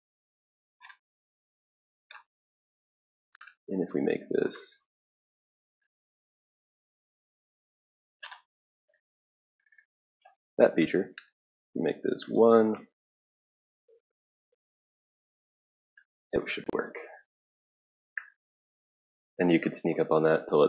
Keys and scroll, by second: 1.8 typing, 2.9-4.2 typing, 12.2 1, 12.3 Return.